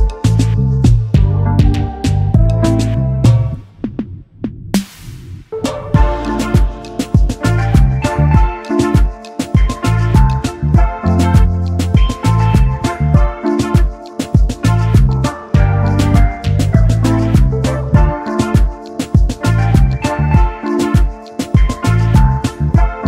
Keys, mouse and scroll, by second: 3.1 double click, 4.8 alt+shift+click, 15.3 scroll up 1, 15.3 scroll down 1, 15.8 scroll up 1, 15.8-17.0 scroll down 1, 17.0-17.9 scroll up 1, 17.9-20.4 scroll down 1, 20.6 Up, 20.7 Up, 22.5 alt+click.